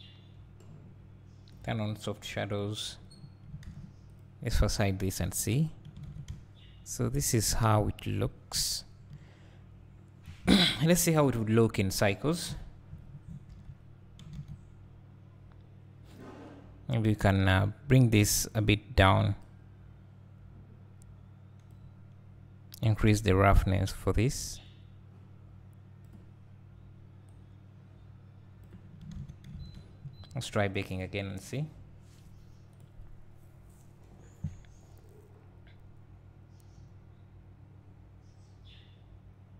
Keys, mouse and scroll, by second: 2.5 click, 3.1 scroll up 1, 4.2 click, 5.2 h, 6.3 `, 7.2 scroll up 1, 7.5 `, 8.2 scroll down 1, 8.6 `, 10.2 scroll down 1, 10.4 `, 11.2 KP_0, 13.9 alt+h, 16.2 click, 17.6 click, 24.4-39.5 drag, 29.6 alt+a.